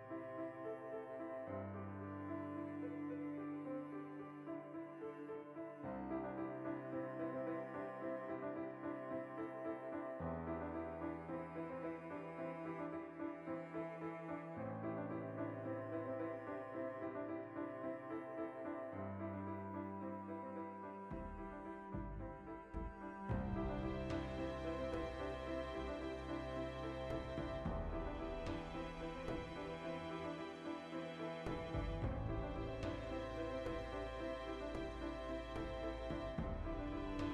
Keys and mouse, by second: 0.2 g, 0.7 shift+click, 0.9-1.9 ctrl+middle drag, 1.9 right click, 2.2 KP_Decimal, 2.4 ctrl+middle click, 3.1 click, 3.6 shift+right click, 4.1 middle click, 4.6 g, 5.3 shift+click, 5.3 middle click, 5.9 g, 6.9 click, 7.2-9.9 middle drag, 9.1 ctrl+r, 9.9 right click, 10.0 middle click, 11.4 ctrl+r, 12.5 right click, 12.6 middle click, 13.2 Tab, 13.3 middle click, 14.9 middle click, 15.1 \, 15.4 right drag, 15.4 x, 15.6-18.2 shift+middle drag, 16.0 z, 18.2 shift+right drag, 18.6 ctrl+p, 19.6 ctrl+z, 20.1 ctrl+p, 20.9 right drag, 21.1-26.0 middle drag, 21.3 r, 22.1 right click, 24.0 r, 24.9 right click, 25.6 r, 26.0 right click, 26.1 middle click, 26.4 r, 27.1 right click, 27.2-29.6 middle drag, 27.9 r, 28.6 click, 28.7 r, 29.2 click, 29.6 r, 30.3 click, 30.4 middle click, 34.0 alt+g, 34.6 z, 34.8 alt+r, 35.1 middle click, 35.7 right click, 36.1 click, 36.4-37.3 ctrl+middle drag, 36.9 alt+q.